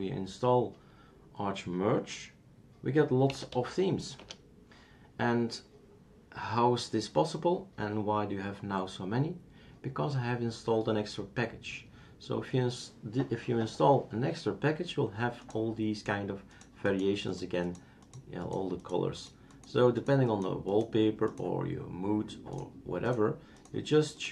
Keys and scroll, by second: 3.3-3.7 typing, 4.2 Return.